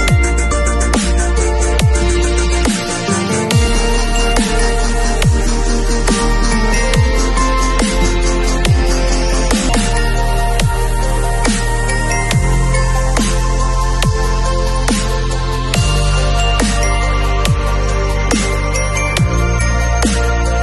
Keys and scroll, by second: 4.1 ], 4.8 [, 6.0 ], 7.5 ], 9.2 [, 9.9 ], 12.0 [, 15.6 ], 19.1 ].